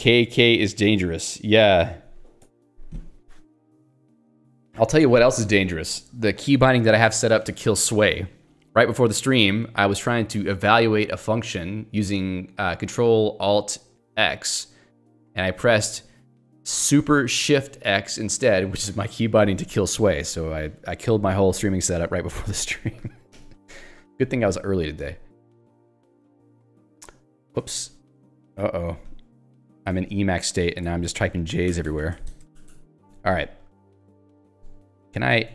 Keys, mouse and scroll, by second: 2.4 Escape, 23.6 click, 23.7 click, 25.8 alt+j, 26.5 j, 27.6 BackSpace, 29.9 ctrl+z, 30.9 Escape, 31.1 h, 32.2 x, 33.1 Escape, 33.5 j, 34.5 x.